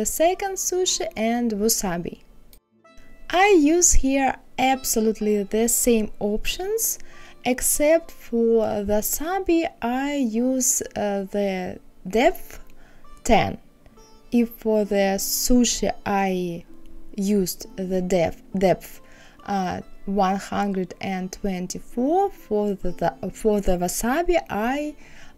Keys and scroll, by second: 6.3 KP_1, 6.3 KP_3, 9.0 KP_Subtract, 9.2 KP_6, 9.3 KP_3, 10.7 KP_5.